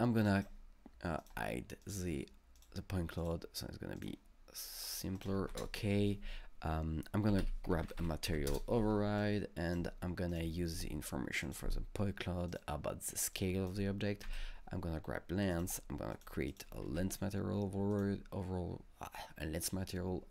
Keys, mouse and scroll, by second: 0.3 click, 1.2 click, 1.8 click, 2.6 click, 3.2 click, 4.5 click, 4.9 click, 5.2 double click, 5.5 ctrl+space, 7.1-8.5 typing, 9.2-11.5 drag, 11.5-12.5 drag, 12.5 click, 13.4-16.1 drag, 14.3 ctrl+c, 16.1 click, 16.5 click, 16.8 ctrl+v, 17.9 click.